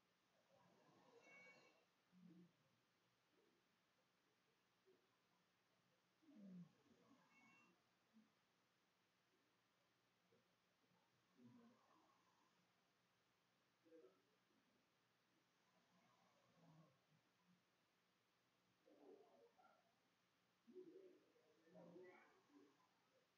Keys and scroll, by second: 0.0-2.4 typing, 7.3-10.0 typing, 15.5-17.1 typing, 18.2 o, 19.0 BackSpace, 19.4 BackSpace, 19.9 BackSpace, 20.8 Delete, 21.3-22.5 typing.